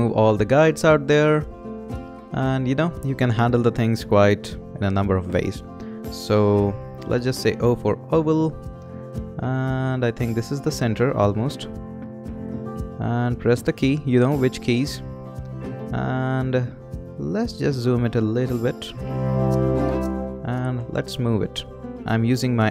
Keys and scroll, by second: 7.6 o, 21.2 Right.